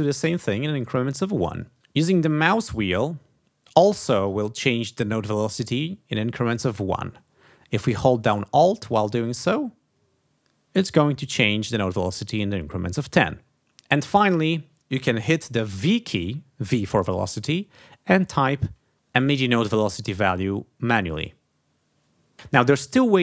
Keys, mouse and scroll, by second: 1.5 ctrl+alt+Down, 2.9-3.4 scroll up 2, 3.8-4.8 scroll up 2, 5.2-5.6 scroll up 2, 5.9-6.6 scroll up 2, 6.7 scroll up 2, 8.7-10.1 alt+scroll down 8, 10.8-11.4 alt+scroll up 2, 11.9-12.5 alt+scroll down 2, 12.8-13.4 alt+scroll up 4, 15.9 v, 21.1 click.